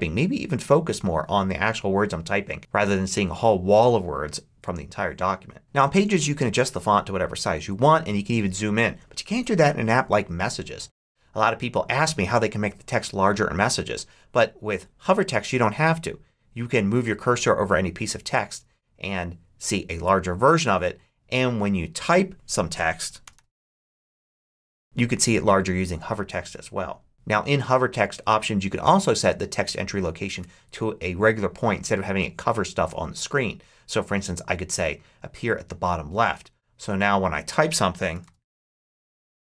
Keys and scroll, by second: 21.6 typing, 22.9-24.9 typing, 37.8-39.5 typing.